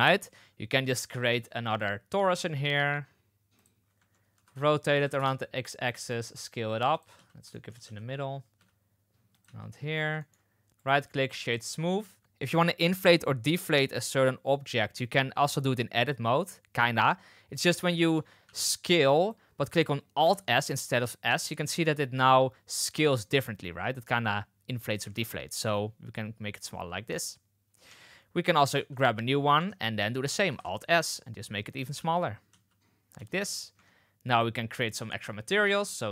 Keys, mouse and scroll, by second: 1.2 shift+a, 4.3 r, 5.8 s, 7.1 z, 7.4 shift+middle drag, 7.8 z, 8.5 s, 9.4 z, 10.1 shift+middle drag, 17.6 Tab, 18.4 s, 20.1 alt+s, 25.0 alt+s, 27.8 Tab, 28.7 shift+d, 29.5 Tab, 30.4 alt+s, 31.9 z, 32.4 z, 33.1 z, 33.7 Tab, 34.2 click.